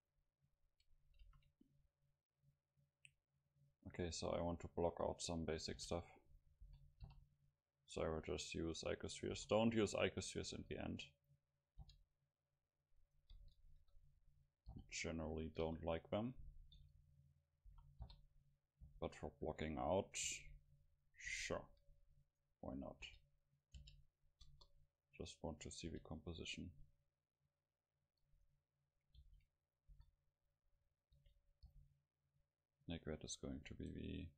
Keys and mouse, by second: 1.2 shift+a, 5.8 g, 6.4-9.0 drag, 6.7 s, 9.3 s, 10.2-11.8 drag, 10.6 s, 11.8 g, 13.0 click, 13.7 KP_7, 14.1 click, 14.7 g, 15.6-17.4 drag, 15.6 KP_0, 16.8 s, 17.6 click, 17.7 s, 18.9 g, 20.3 shift+d, 21.7 KP_7, 22.3 click, 22.3 right click, 23.1 g, 23.2-26.1 drag, 23.8 g, 24.2 right click, 24.5 KP_0, 25.9 g, 28.2-31.6 drag, 29.2 shift+d, 29.9 s, 31.2 r, 31.7 g, 32.4-34.3 drag.